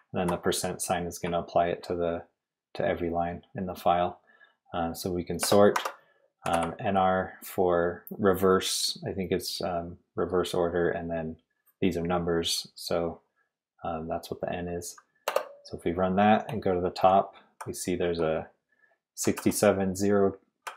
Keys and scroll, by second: 0.1 Left, 1.2 Left, 1.2 Right, 1.5 Right, 2.8 Right, 5.4-7.0 typing, 15.0-15.8 typing, 16.8-19.3 typing, 20.6 l.